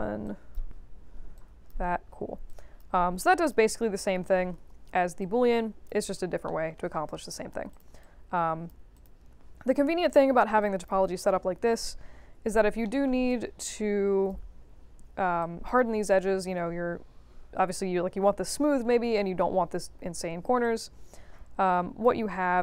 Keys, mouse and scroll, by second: 0.2 click, 1.3 click, 2.4 click, 3.4 click, 5.2 alt+click, 6.4 alt+middle click, 7.0 right click, 7.7 click, 8.0-8.6 alt+drag, 8.9 click, 9.4 3, 10.6 alt+drag, 11.0 1, 11.8-12.3 scroll up 2, 12.3 3, 12.8 alt+middle click, 13.2-14.2 alt+drag, 15.4 alt+click, 20.6-22.0 drag.